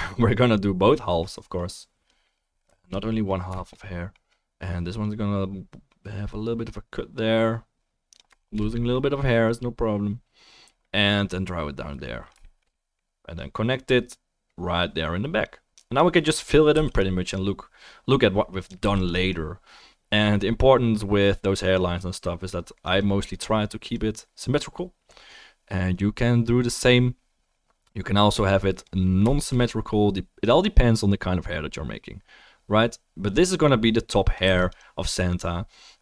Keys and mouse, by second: 16.7 f, 17.0 click, 17.3 middle click, 17.3 right click, 17.3 click, 18.9 f, 19.0 click, 34.5 f, 34.6 click.